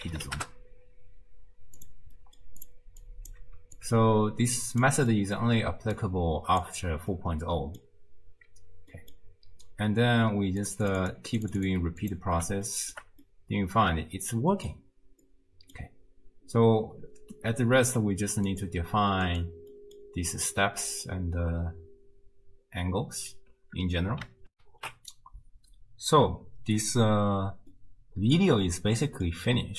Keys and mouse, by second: 2.3 middle click, 2.6 click, 3.2 click, 3.8-4.9 alt+drag, 5.2 click, 6.0 click, 7.3 click, 9.1 drag, 10.6 click, 11.0 click, 12.1 click, 12.7 shift+drag, 13.2-14.7 drag, 15.4 click, 18.6 click, 19.8 click, 24.6 ctrl+alt+shift+q, 27.7 click, 29.1 click.